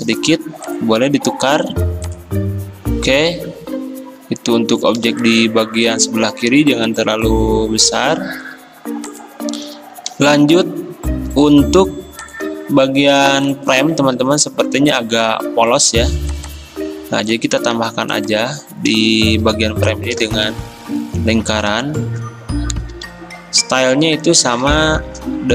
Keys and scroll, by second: 14.0 ctrl+z, 17.8 ctrl+z, 19.4 i, 23.0 i, 25.0-25.5 typing.